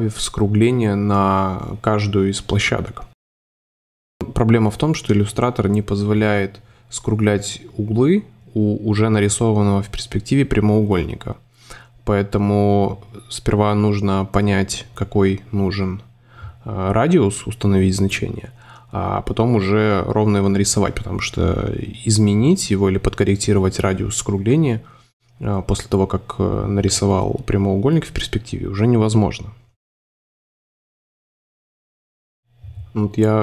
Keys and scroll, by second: 2.7 Up, 5.2 Down, 6.2 Up, 8.6 a, 10.8 BackSpace, 13.2 Down, 15.3 Down, 19.6 space, 21.2 space, 23.4 super+z, 25.4 Up, 26.8 Up, 28.1 Up, 30.6 Delete.